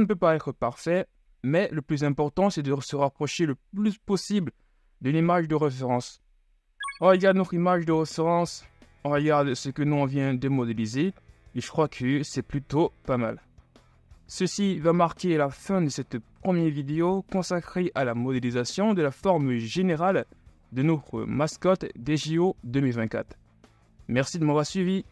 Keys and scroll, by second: 6.9 z, 9.3 z, 11.7 KP_3, 13.0 KP_1, 13.7 z.